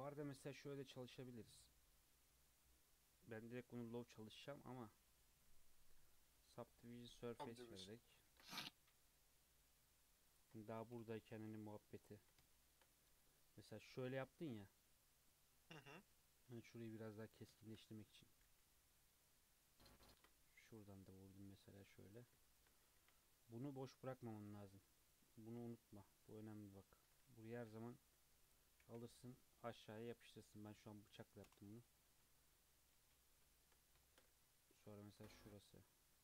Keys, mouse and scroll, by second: 1.4 click, 4.9-6.6 drag, 6.6-7.0 middle drag, 7.0-7.5 scroll up 3, 7.5-7.9 shift+middle drag, 7.9 Tab, 8.3 ctrl+r, 11.4 KP_1, 11.7 KP_3, 12.0-12.5 scroll up 4, 12.5 shift+middle click, 12.8-14.0 scroll up 6, 14.2 alt+z, 14.6-15.0 scroll down 4, 15.1-16.1 scroll up 4, 16.1 g, 18.4 g, 20.2 ctrl+r, 22.4 shift+middle click, 23.0 1, 24.2 click, 25.5 1, 26.2-27.7 drag, 27.7 k, 32.0-32.6 scroll down 4, 32.1 Tab, 32.6 middle click, 33.0 alt+z, 33.4 middle click, 34.3 Tab, 34.4-34.8 scroll up 2, 35.1 ctrl+r.